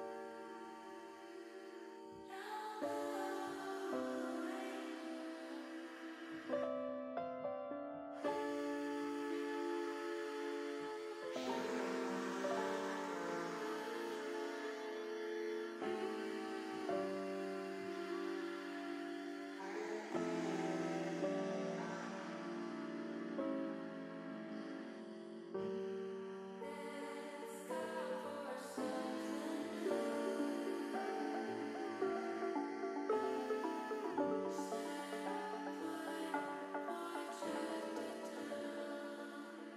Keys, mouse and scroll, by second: 2.3 click, 3.6 ctrl+r, 6.3 click, 7.1 ctrl+r, 10.1 click, 10.5 middle click, 12.3 ctrl+r, 15.1 click, 16.2 ctrl+r, 19.5 click, 22.3 middle click, 23.5-24.7 middle drag, 24.9-26.0 middle drag, 26.3 middle click, 26.7 middle click, 27.9 middle click, 29.5 click, 31.6-32.7 drag, 33.4 click, 37.4 middle click, 39.0 click.